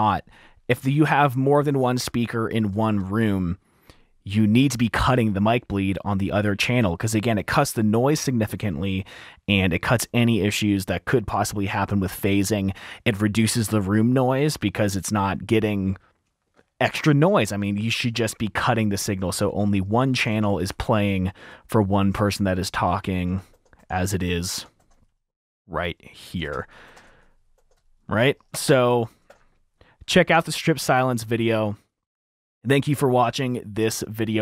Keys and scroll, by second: 23.4 typing, 24.8 typing, 26.9-27.7 typing, 27.9 F2, 29.9 super+`, 29.9 F7, 30.4 r.